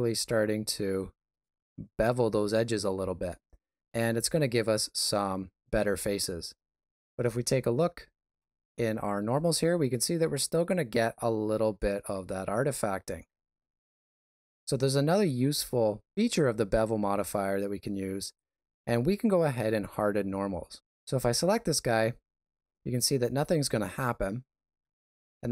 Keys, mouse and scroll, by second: 0.2 shift+middle click, 2.5 shift+z, 3.2 ctrl+middle click, 12.8 ctrl+space, 21.0 click, 24.8 middle click.